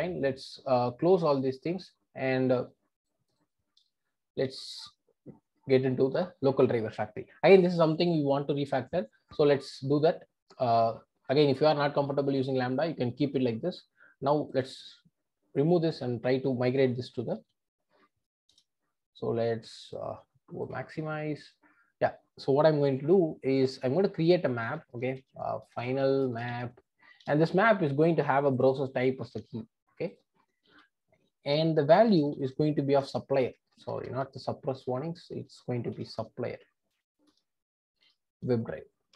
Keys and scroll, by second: 18.5 Return, 29.3 super+c, 30.7 super+v, 33.0 Return, 37.3 Return.